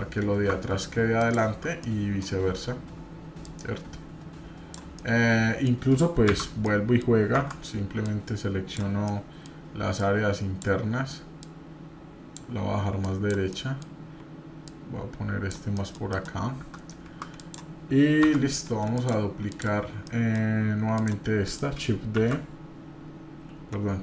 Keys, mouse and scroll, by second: 1.8 middle click, 3.4-4.7 drag, 5.0 middle click, 6.3 shift+z, 6.7 middle click, 7.3 Tab, 8.0 click, 9.0 middle click, 9.9 click, 11.4-12.4 drag, 13.0 click, 13.5 middle click, 14.6 click, 15.7 middle click, 17.3 click, 18.2 Tab, 19.0 click, 19.5 click, 20.0 middle click, 20.9 click, 21.4 middle click, 22.2 shift+s.